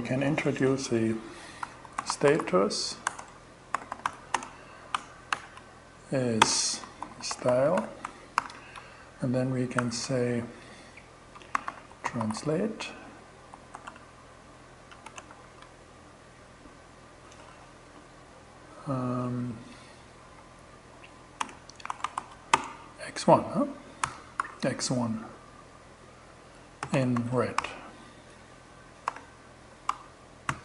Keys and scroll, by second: 0.8-4.8 typing, 5.8-7.7 typing, 7.8 alt+5, 9.2 shift+2, 10.8-14.7 typing, 16.9 Left, 19.8 Right, 20.8-23.8 typing, 26.0-27.5 typing, 27.8 alt+d, 28.5 alt+6, 29.3 alt+shift+6, 29.9 alt+shift+,.